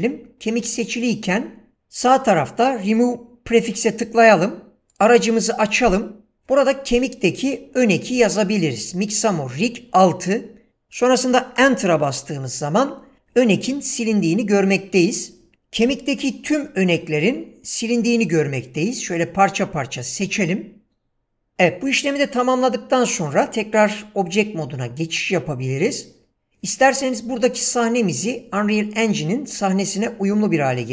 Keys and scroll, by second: 11.6 Return, 22.1 Tab.